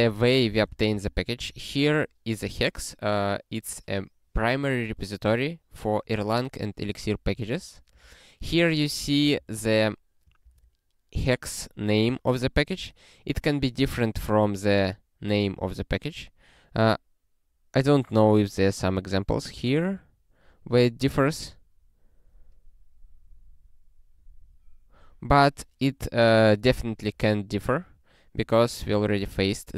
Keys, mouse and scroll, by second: 0.0 alt+f, 0.6 ctrl+space, 0.9 alt+b, 1.5 ctrl+g, 7.6 alt+f, 7.9 alt+f, 8.7 alt+b, 9.2 ctrl+space, 9.5 alt+f, 10.4 ctrl+g, 15.4 click, 15.6 double click, 18.2-19.3 scroll down 59, 21.7-22.2 scroll down 29, 27.2-28.3 scroll up 5, 28.4 click, 28.9 alt+<.